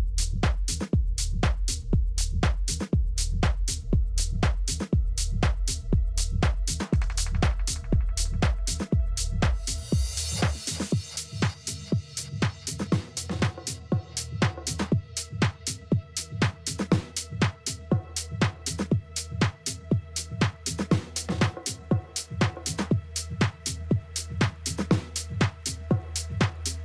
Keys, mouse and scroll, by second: 4.2-6.1 drag, 10.1-11.9 drag, 13.2-14.9 drag, 23.7-25.6 drag.